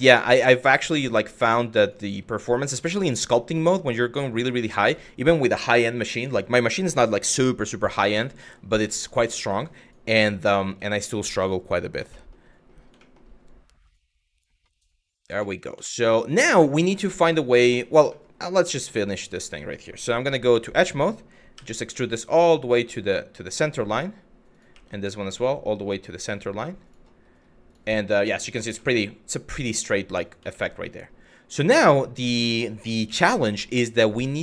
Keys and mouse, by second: 0.3 click, 0.9 click, 1.5 click, 2.1 g, 2.2 click, 2.7 middle click, 3.2 click, 3.9 click, 4.3 middle click, 7.7 shift+middle click, 8.4 click, 8.8 g, 9.4 click, 10.0 click, 10.3 g, 11.2 click, 11.9 shift+middle click, 12.7 middle click, 15.0 shift+middle click, 15.5 shift+middle click, 15.9 click, 17.0 shift+middle click, 18.4 shift+middle click, 18.8 click, 20.1 2, 21.2 e, 23.2 click, 24.2 click, 24.3 e, 26.4 click, 28.5 shift+middle click, 30.3 shift+middle click, 31.3 click, 32.0 shift+click, 32.7 f, 33.1 middle click, 34.3 click.